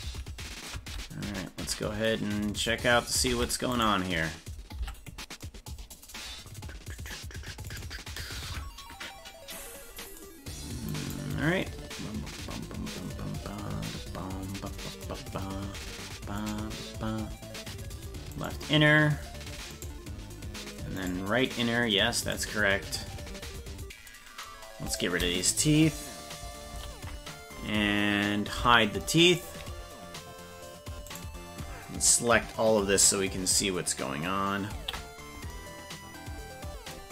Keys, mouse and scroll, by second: 0.1 ctrl+z, 3.3 ctrl+Tab, 3.7 right click, 4.8 Tab, 6.5 scroll up 2, 7.7 right click, 8.5 KP_Decimal, 9.1-10.2 scroll down 15, 14.2-14.5 scroll down 2, 16.4 right click, 18.4 right click, 19.7 right click, 21.0 right click, 22.2 right click, 24.9 right click, 26.7 ctrl+l, 28.6 h, 31.1 right click, 34.7 ctrl+l.